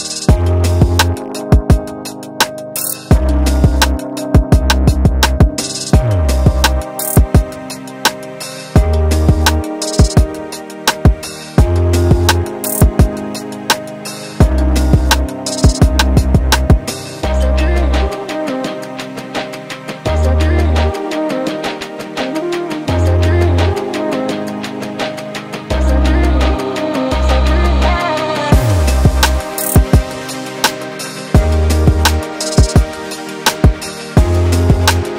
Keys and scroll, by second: 12.7 Return, 13.4 0, 13.5 Return, 14.5 F1, 15.5 ctrl+z, 19.3 F1, 19.4 F2, 20.8 1, 23.7 ctrl+z.